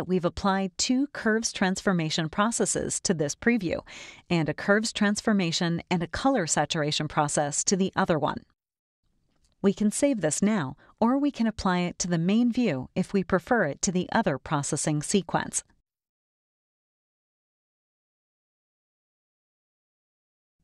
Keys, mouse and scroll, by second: 0.8 click, 1.3 click, 2.9 click, 3.5 click, 4.3 click, 5.2 click, 7.3 click, 8.0 click, 9.2-11.8 drag, 12.7 click, 13.4-16.2 drag, 18.5 scroll down 1, 20.5 click.